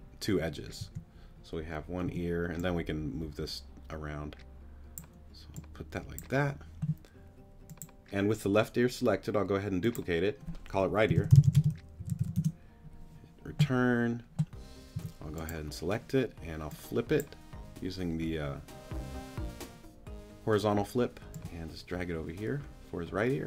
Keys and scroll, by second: 0.8 t, 2.1 t, 11.1-12.2 typing, 12.4 Return, 14.9 t.